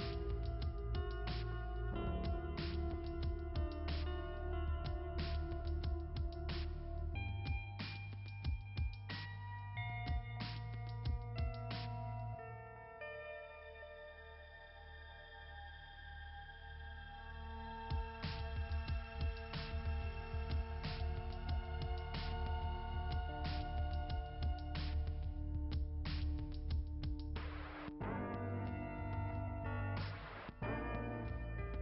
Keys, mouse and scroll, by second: 0.1 click, 0.3 click, 1.3 scroll up 2, 5.6 ], 6.3 ], 6.6 click, 17.7 right click, 18.0 right click, 18.3 right click, 20.1 click, 20.3 click, 20.9 click, 21.0 click, 23.2 right click, 23.4 right click, 25.3 click, 25.6 click, 27.0 click, 28.0 click, 29.6 click, 31.5 ].